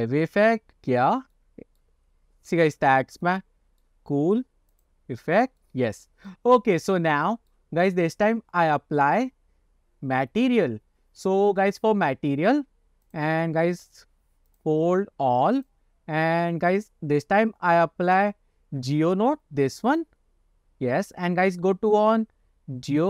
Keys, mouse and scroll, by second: 0.2 click, 1.1-1.4 scroll down 2, 1.4 middle click, 2.2 scroll up 1, 2.6 shift+middle drag, 3.0 scroll up 1, 3.3-3.9 middle drag, 5.1 click, 5.7-6.1 middle drag, 6.4-6.7 shift+middle drag, 7.2-7.6 shift+middle drag, 13.2 click, 13.8 click, 14.6 click, 15.6 click, 16.5-20.5 drag.